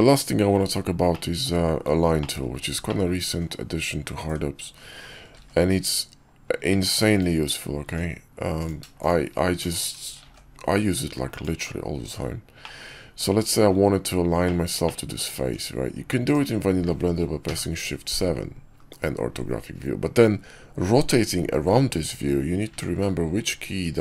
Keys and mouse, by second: 1.0-1.4 middle drag, 2.1 shift+middle click, 2.8 middle click, 4.1 Tab, 5.2 ctrl+r, 7.7 Tab, 8.5 click, 10.1 ctrl+shift+b, 11.8 Tab, 12.5-13.1 drag, 14.3 click, 14.8 click, 14.8 middle click, 15.3 Tab, 17.3 shift+KP_7, 18.7 KP_5, 22.6-24.0 typing.